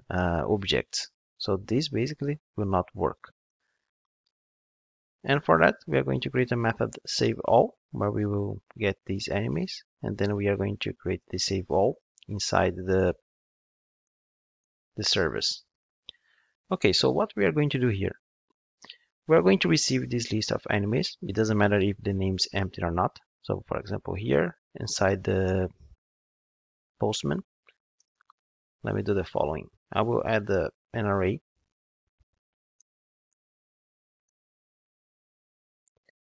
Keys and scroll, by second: 9.5 alt+Return, 12.9 shift+super+Up, 13.7 shift+super+Down, 17.7 ctrl+Tab.